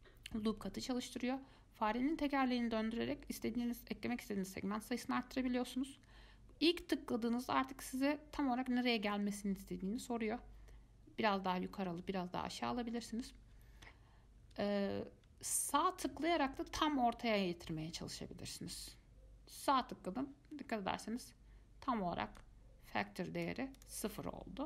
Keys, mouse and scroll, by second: 22.6-24.6 drag.